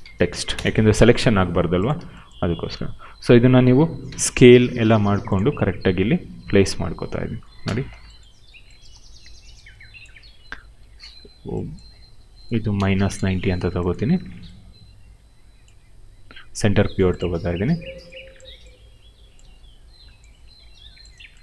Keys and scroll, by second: 0.0-0.2 typing, 0.5 Return, 2.7 r, 4.0 r, 7.6 f, 8.8 w, 10.7 e, 12.7 -, 13.0 Return, 13.9 w, 15.6 r, 19.3 w.